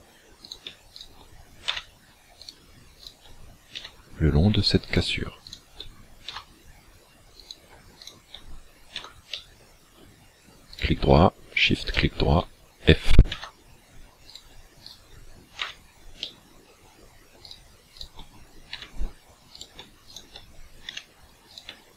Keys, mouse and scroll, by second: 0.5 right click, 1.0 right click, 1.7 f, 2.4 right click, 3.1 shift+right click, 3.8 f, 4.9 right click, 5.5 shift+right click, 6.3 f, 7.4 right click, 8.0 shift+right click, 9.1 f, 9.3 middle click, 10.7 right click, 11.9 shift+right click, 13.3 f, 14.4 right click, 14.9 shift+right click, 15.6 f, 16.2 middle click, 17.5 right click, 17.9 shift+right click, 18.8 f, 19.7 right click, 20.1 shift+right click, 20.9 f, 21.5 right click.